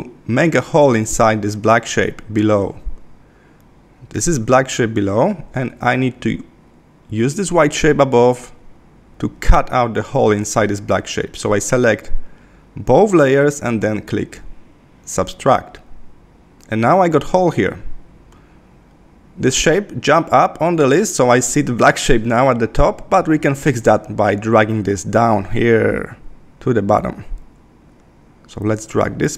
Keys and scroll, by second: 5.2 super+z.